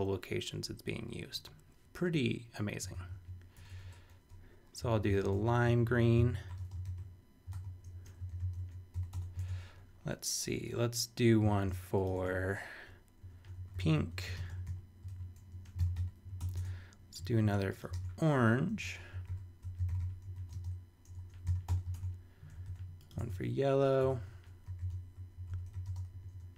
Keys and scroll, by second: 2.6-7.0 typing, 7.5 super+z, 7.9 shift+super+3, 8.3 shift+super+v, 8.9 shift+super+;, 9.1 Return, 9.5 super+Tab, 11.6 shift+super+e, 12.1 shift+super+Tab, 12.7 super+Tab, 13.1-14.7 typing, 15.1 super+z, 15.5 shift+super+3, 15.8 shift+super+v, 15.9 super+;, 16.4 super+Return, 16.5 super+Tab, 17.2 shift+super+Tab, 17.4 shift+super+e, 17.9 shift+super+Tab, 18.5 super+Tab, 18.8 shift+super+4, 18.9-21.1 typing, 21.5 shift+super+v, 21.7 super+;, 21.9 super+Tab, 22.5 shift+super+Tab, 22.6 shift+super+e, 23.2 shift+super+Tab, 23.7 super+Tab, 24.0 super+Return, 24.4-26.0 typing, 26.4 shift+super+3.